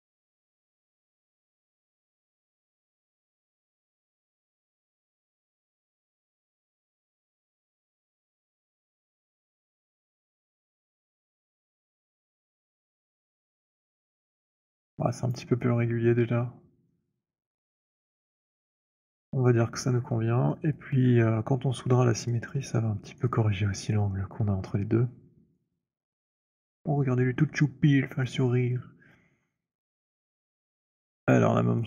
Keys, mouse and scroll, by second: 1.4 click, 3.1 alt+click, 5.1 click, 5.3 alt+middle click, 8.9 alt+right click, 9.2 alt+click, 10.8 alt+middle click, 12.5 alt+middle click, 15.1 alt+click, 15.8 alt+right click, 15.8-17.5 scroll, 17.8 right click, 18.1 click, 18.4-18.9 scroll, 19.4 alt+click, 19.8-20.5 scroll, 20.5-23.0 alt+middle click, 21.2 alt+click, 22.7 alt+click, 23.2 alt+right click, 25.3 alt+click, 27.4 alt+click, 29.1 alt+click, 29.6 alt+middle click, 30.6 alt+click, 31.0 alt+right click, 31.5 alt+click.